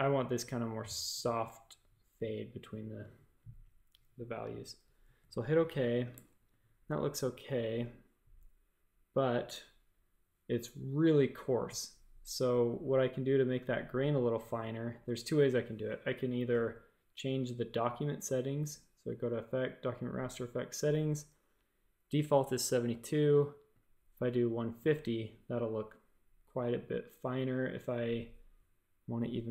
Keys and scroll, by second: 6.1 shift+super+a, 6.4 space.